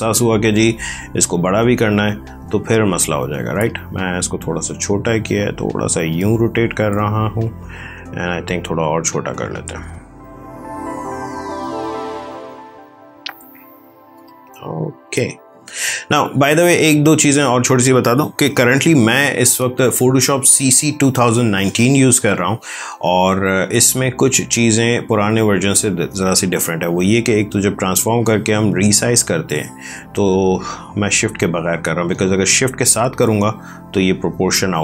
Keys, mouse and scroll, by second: 8.6 click, 12.4 click, 16.0 click, 16.3 ctrl+z, 19.5 click, 25.0 ctrl+t, 27.7 click.